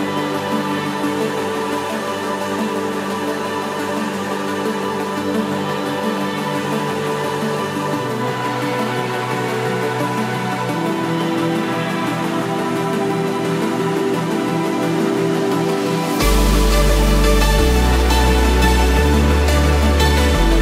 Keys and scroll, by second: 0.6 ctrl+-, 1.3 ctrl+0, 2.0 ctrl+=, 2.8 ctrl+space, 17.1 ctrl+-, 20.4 ctrl+=.